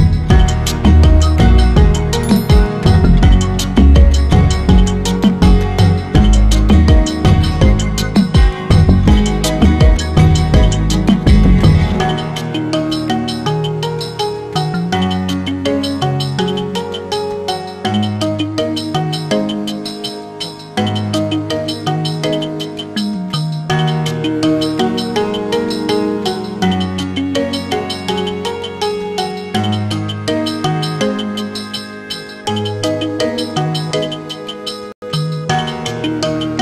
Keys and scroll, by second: 23.3 ctrl+j, 31.5 ctrl+alt+shift+e.